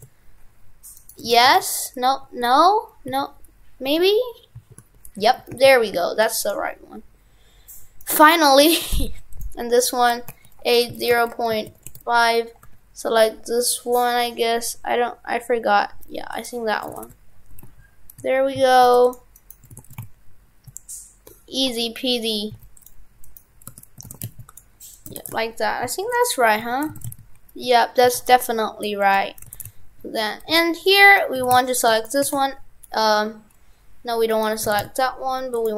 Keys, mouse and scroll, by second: 1.0 right click, 1.2 right click, 1.3 shift+f, 8.0 right click, 8.9 shift+f, 16.9 shift+f, 19.4 right click, 19.7 shift+f, 23.2 right click, 24.0 shift+f, 24.9 right click, 25.1 right click, 25.2 shift+f, 26.6 Tab, 26.9 shift+f, 29.2 Tab, 29.5 shift+f, 31.1 right click, 31.4 shift+f, 34.4 right click, 34.7 shift+f.